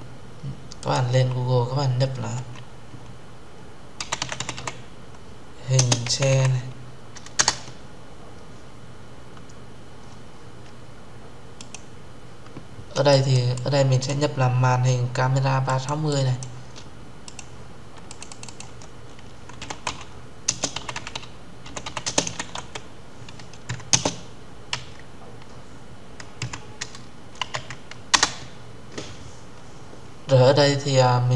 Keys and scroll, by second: 7.1 Return, 11.5 Return, 27.8 Return.